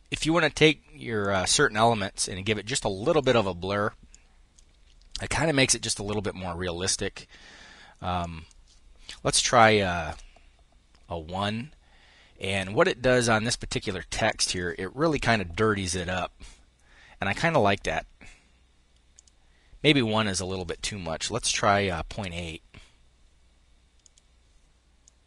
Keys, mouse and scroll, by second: 0.6-1.7 drag, 4.5 click, 7.6 click, 9.1 1, 9.4 Return, 11.9 click, 13.6-14.6 drag, 14.8 1, 15.2 Return, 18.5 click, 19.6 click, 20.8 ., 21.2 8, 21.4 Return, 23.4-24.9 drag.